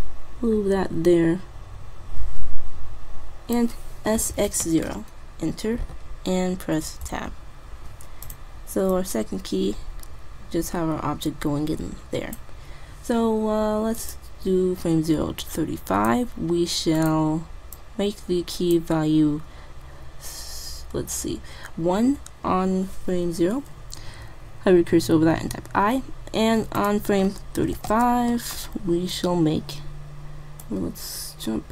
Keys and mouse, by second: 0.5-1.7 drag, 4.2 s, 7.2 Tab, 8.3 click, 14.1-19.6 drag, 25.2 i, 26.8-28.6 drag, 30.7-31.7 drag.